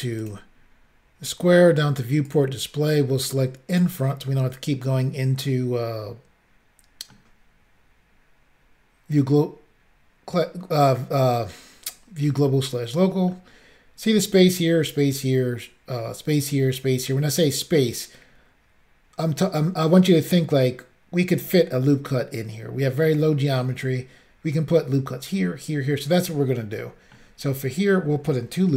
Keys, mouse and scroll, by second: 0.2 click, 0.3 click, 2.3 click, 2.4 click, 3.8 click, 3.8 click, 4.4 middle click, 5.6 middle click, 9.2 middle click, 12.5 middle click, 26.9 shift+middle click.